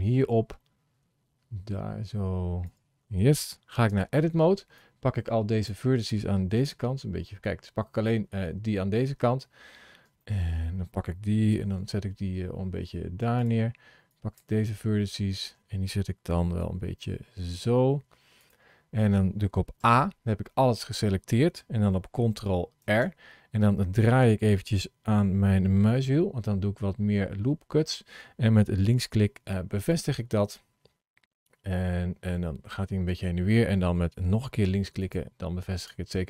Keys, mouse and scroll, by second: 3.8 Tab, 4.6 click, 6.4 KP_Decimal, 7.2-8.6 scroll down 10, 9.1 scroll down 2, 9.7 scroll down 2, 10.0 shift+middle click, 11.4 g, 13.9 click, 14.8 shift+middle click, 16.5 g, 18.6-19.1 scroll down 2, 19.6 a, 22.7 ctrl+r, 25.5 scroll, 28.7-31.9 drag, 34.2 click, 35.6 click.